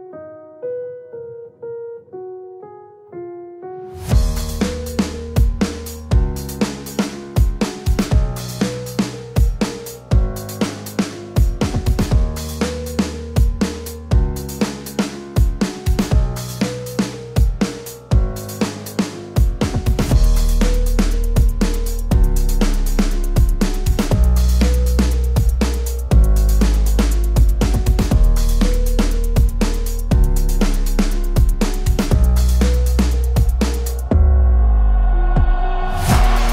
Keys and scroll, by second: 4.3 KP_7, 4.6 KP_5, 4.8 Tab, 7.5 KP_5, 7.8 KP_0, 8.3 Return, 18.1 KP_2, 18.3 KP_5, 19.2 Return, 29.2 KP_2, 29.4 KP_5, 30.4 Tab, 32.0 KP_1, 32.2 KP_2, 33.3 Return.